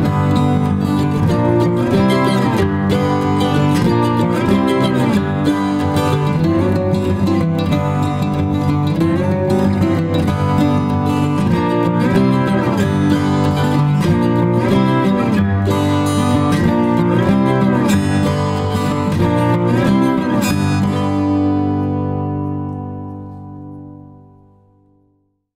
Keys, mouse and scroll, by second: 2.9 typing, 5.2 space, 5.9 alt+click.